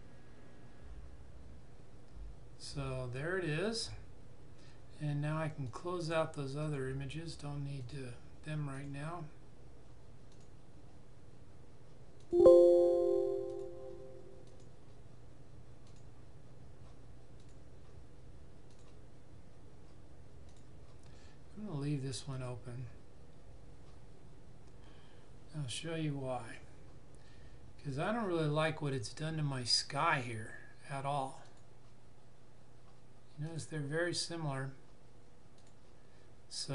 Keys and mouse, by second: 2.6 click, 31.4 click.